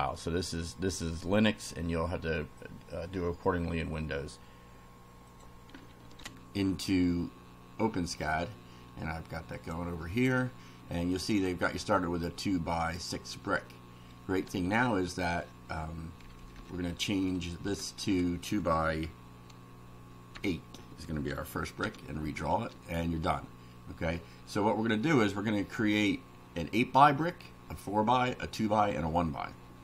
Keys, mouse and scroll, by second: 5.2 click, 6.2 ctrl+r, 9.5 click, 16.2 Down, 17.6 BackSpace, 20.3 8.